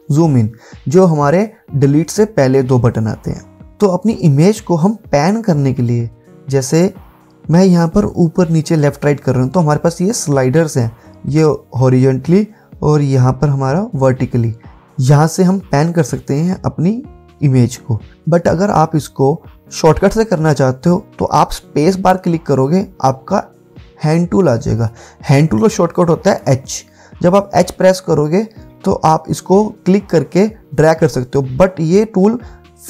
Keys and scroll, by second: 22.2-24.1 typing, 25.4-26.4 typing.